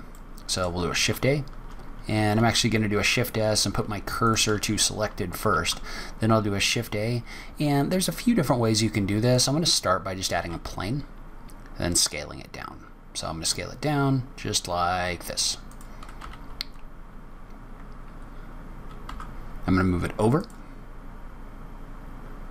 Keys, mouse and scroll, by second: 0.0 middle click, 0.8 shift+a, 2.3 shift+s, 20.7-21.5 scroll up 3, 21.5-21.8 scroll down 1.